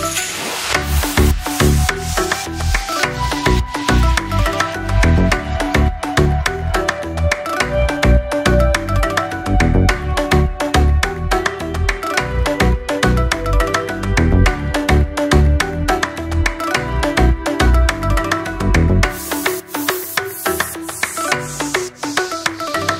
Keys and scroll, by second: 1.5 Delete, 5.6 Delete, 7.1 Delete, 8.2 Delete, 9.2 Delete, 11.4 Delete, 15.2 Delete, 18.3 Delete, 19.2 Delete, 20.1 Delete, 21.5 Delete, 22.1 Delete.